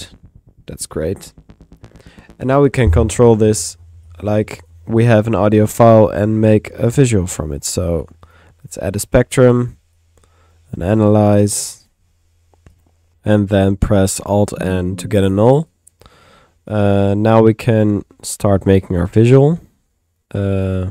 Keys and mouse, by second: 4.1 click, 5.3-6.7 drag, 6.2 Tab, 6.2-7.0 typing, 7.6 click, 8.3 click, 8.7 click, 10.0-11.0 drag, 10.8 Tab, 11.0 a, 11.9 click, 12.8 click, 12.9-13.6 typing, 15.0-16.1 typing, 15.2 alt+click, 16.1 alt+click, 16.2 middle click, 16.7 click, 17.4 Tab, 18.5 Tab, 20.6-20.9 typing, 20.8 click.